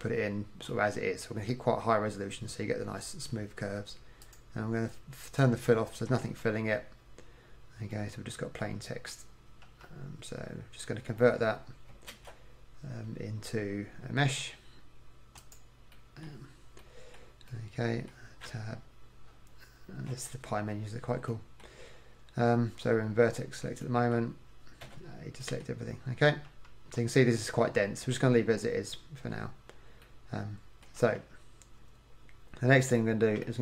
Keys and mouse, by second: 0.8-3.9 middle drag, 4.3-6.3 middle drag, 6.3 KP_1, 8.7 middle click, 9.8 KP_1, 12.2 alt+c, 16.0-17.8 middle drag, 17.9 middle click, 18.5 Tab, 24.9 a, 26.6 KP_1, 31.1 KP_1.